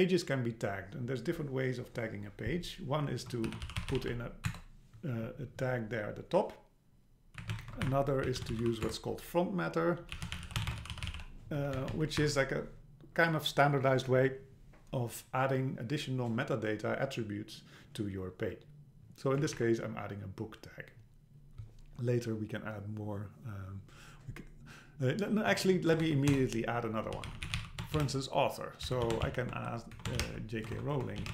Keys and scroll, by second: 4.5 Return, 7.4 Up, 7.6 shift+super+Right, 7.9 BackSpace, 8.9 Return, 11.8 Down, 12.2 BackSpace, 19.4 Up, 25.5 Up, 26.0 super+Right, 26.3 Return, 30.0 BackSpace.